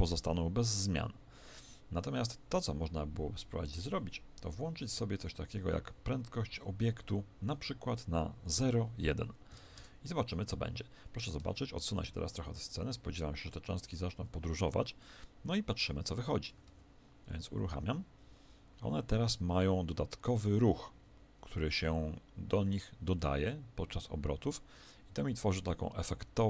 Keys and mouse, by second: 8.4 click, 10.9-13.4 middle drag, 16.6 alt+a, 23.1-26.3 middle drag.